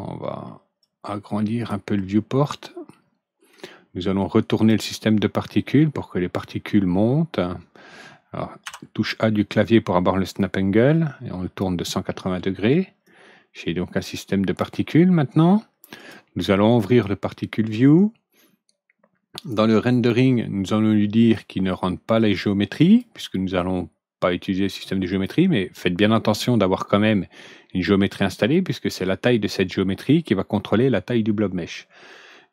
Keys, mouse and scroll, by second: 0.7 click, 2.3-3.5 middle drag, 4.5 click, 6.3-11.5 drag, 8.6 ctrl+a, 13.0-14.5 drag, 15.9 click, 16.8 click, 19.3 click, 19.8 click, 21.1 click, 22.1 click, 22.7 click, 25.0 click.